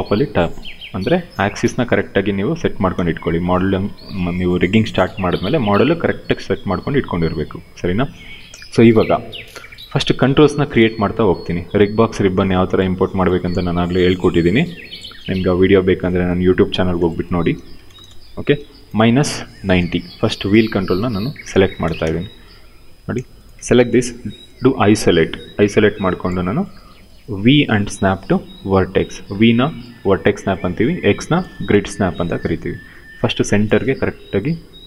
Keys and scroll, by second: 2.6 space, 17.0-17.9 typing, 19.5 w, 20.6 space, 23.8 ctrl+1, 27.5 v, 31.1 r, 33.4 w.